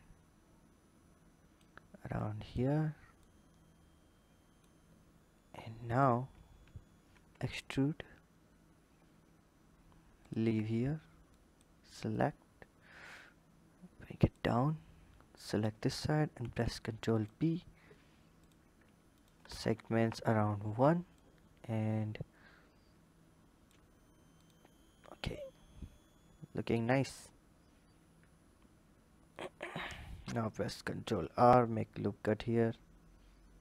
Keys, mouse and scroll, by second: 5.3 click, 5.5 click, 6.1-6.9 scroll up 1, 6.9 e, 11.1 drag, 11.9 click, 15.1 click, 16.2 ctrl+b, 18.2-20.1 drag, 20.9-24.0 shift+drag, 24.2 click, 26.9 click, 29.1 click, 30.2 ctrl+r.